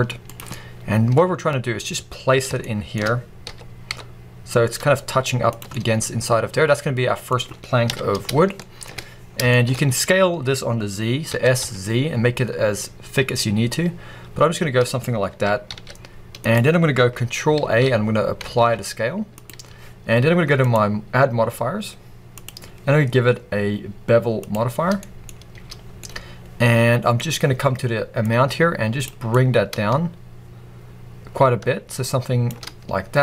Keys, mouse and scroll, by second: 0.1 middle click, 0.3 click, 0.4-5.4 middle drag, 3.4 g, 5.4 click, 5.6-14.9 middle drag, 7.8 KP_1, 9.1-9.4 scroll down 2, 9.6-10.4 scroll up 2, 10.4-11.2 scroll up 1, 11.2 s, 14.9 click, 15.2 g, 16.4 click, 17.5 ctrl+a, 20.5 click, 22.2-24.9 drag, 24.9-28.1 middle drag, 25.2-25.7 scroll up 2, 25.7 scroll down 2, 27.1-28.1 scroll up 2, 28.1 click, 29.2-33.2 drag.